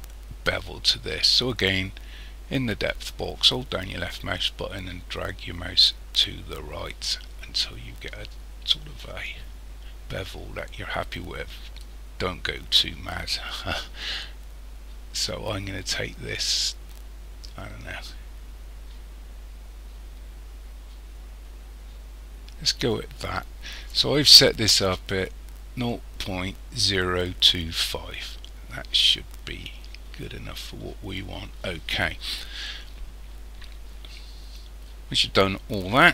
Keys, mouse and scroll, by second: 3.4 click.